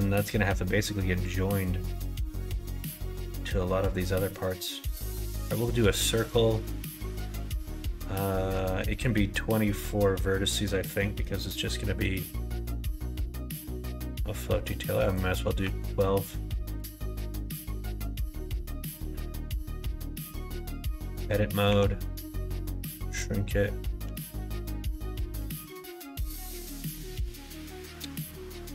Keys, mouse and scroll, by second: 9.3-10.3 middle drag, 11.0 middle click, 11.6 middle click, 14.9-17.2 drag, 17.9 click, 20.9 Tab, 21.6 s, 23.9 g, 25.3 g, 28.3 r.